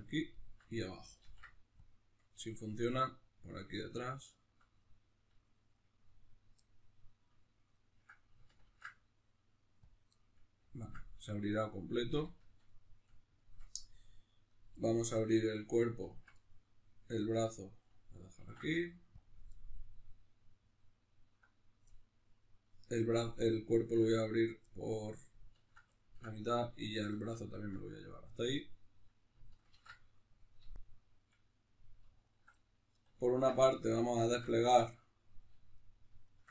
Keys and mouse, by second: 0.3 alt+shift+right click, 1.2 ctrl+e, 2.4-4.2 middle drag, 4.2 alt+right click, 4.7-5.7 middle drag, 5.7 right click, 6.6-7.7 middle drag, 7.7 ctrl+right click, 8.6 ctrl+e, 10.2-14.4 middle drag, 14.4 right click, 14.8-16.1 middle drag, 16.1 alt+right click, 16.4-24.4 middle drag, 18.4 ctrl+e, 24.4 right click, 24.6 middle click, 25.6 ctrl+right click, 26.0-27.5 ctrl+middle drag, 27.5 ctrl+right click, 28.0-32.2 middle drag, 29.7 ctrl+e, 32.2 alt+right click, 32.6-33.8 middle drag, 33.8 alt+shift+right click, 34.5-35.7 middle drag, 35.7-36.5 alt+shift+right drag.